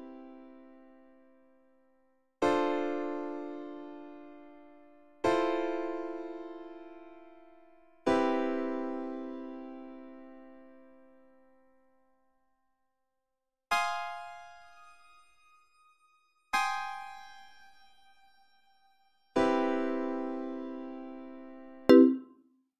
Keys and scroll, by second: 1.6 space, 2.2 space.